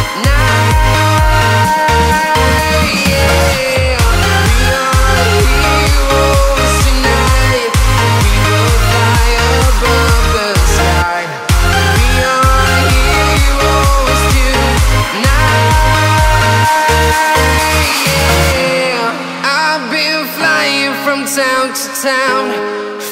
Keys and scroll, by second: 0.6 a, 10.5 v, 12.2 space, 12.7 space, 12.8 a, 15.0-15.7 typing, 16.7 m, 18.6 v.